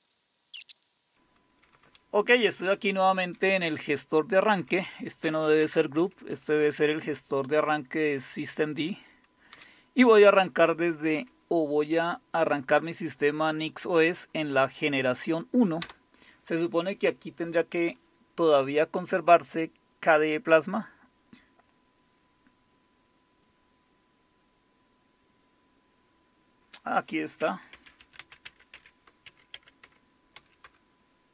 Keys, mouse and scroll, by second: 0.6 click, 0.9 click, 1.0 click, 1.1 Down, 1.1-1.8 typing, 3.2 Down, 3.4 Down, 3.6 Down, 4.4 Up, 4.6 Up, 5.2 Down, 6.0 Up, 6.5 Up, 27.8-30.4 typing, 30.7 Return.